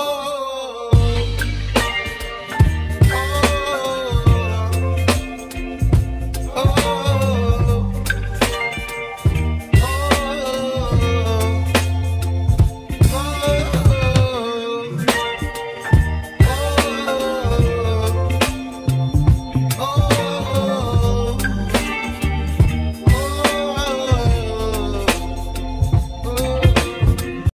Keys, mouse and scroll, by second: 2.9 click, 9.6 click, 10.6 scroll up 3, 11.2-12.8 middle drag, 12.8-13.2 scroll down 1, 13.2-14.3 middle drag, 14.3-14.8 scroll down 2, 14.8 middle click, 15.4 Tab, 16.1-16.7 scroll down 1, 16.7-17.2 scroll up 2, 17.2-17.9 scroll down 1, 17.9-18.9 scroll down 1, 18.9-21.5 middle drag, 24.2-24.8 scroll down 2, 24.8-25.2 shift+middle drag, 25.2 shift+scroll down 1, 25.4-25.8 scroll up 3, 25.8-26.4 scroll down 1, 26.4 click.